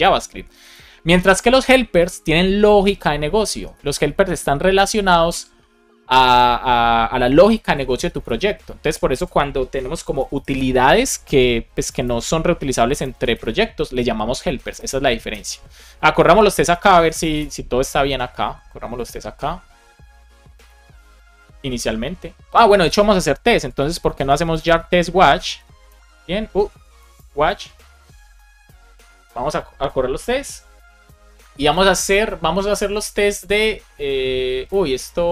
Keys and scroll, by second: 2.7 Right, 3.4 BackSpace, 4.6 Return, 7.2 ctrl+c, 8.7 ctrl+c, 10.0 BackSpace, 11.9 Return, 12.9 Return, 15.2 Return, 16.1 ctrl+c, 16.9 space, 17.3 Return, 20.5 super+b, 23.1 ctrl+c, 24.1 space, 24.7 shift+;, 25.8 Return, 26.6 Up, 27.0 BackSpace, 27.2 Return, 34.6 super+s.